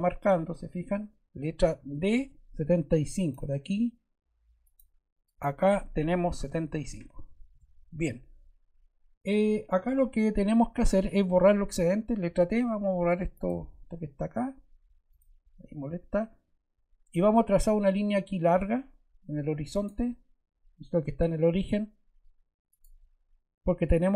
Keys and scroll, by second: 2.1 d, 6.4 7, 6.6 5, 7.4 Return, 12.2 t.